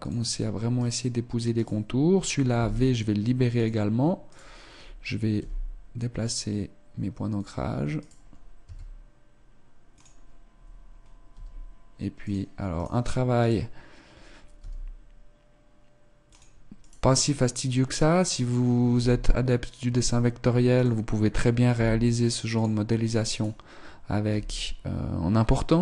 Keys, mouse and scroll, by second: 0.7 right click, 2.5 v, 4.2 right click, 5.3 g, 7.9 right click, 8.6 s, 11.3 g, 12.7 right click, 14.4 right click, 14.6 g, 16.8 right click, 18.9 g, 19.4 click, 20.7 right click, 21.7 v, 23.3 right click, 24.2 g.